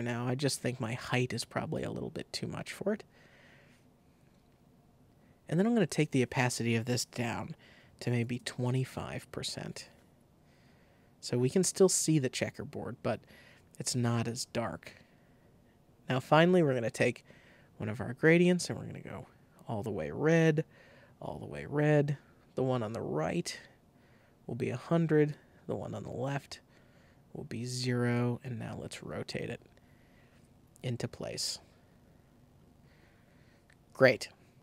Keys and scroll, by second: 7.1 super+a, 8.0 super+2, 8.2 5, 8.3 Return.